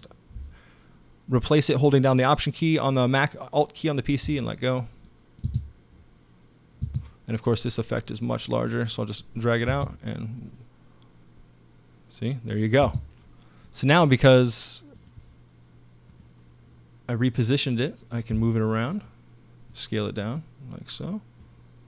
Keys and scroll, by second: 5.5 space, 6.8 space, 9.7 space, 12.8 space.